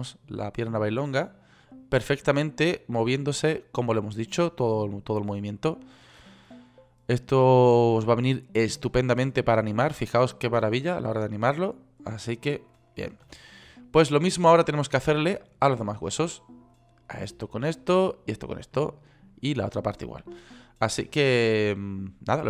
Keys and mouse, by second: 13.9 ctrl+z, 16.7 drag.